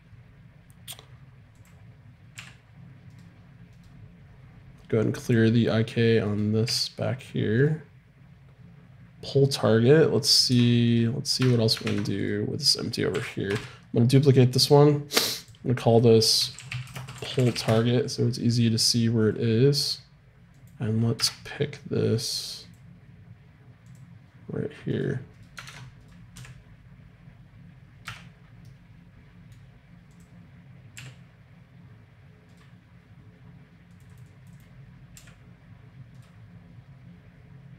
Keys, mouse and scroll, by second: 2.3 g, 5.3 right click, 6.3 right click, 6.6 g, 10.5 Tab, 11.4 Tab, 13.1 KP_7, 13.5 shift+d, 15.4-17.6 drag, 19.2-23.9 right drag, 23.9 click, 24.9-27.6 right drag, 25.6 ctrl+Tab, 26.3 g, 27.9-30.4 middle drag, 30.1-32.0 drag, 30.9 g, 33.9 click, 35.1 g.